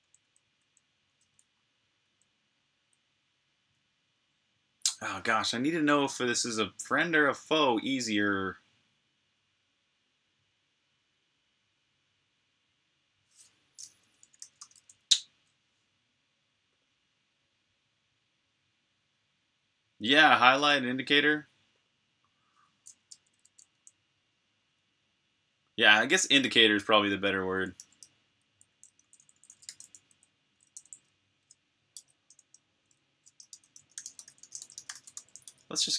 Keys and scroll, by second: 2.7-3.5 typing, 13.9-14.7 typing, 23.0 Escape, 27.7 typing, 29.5-32.2 typing, 33.5-35.9 typing.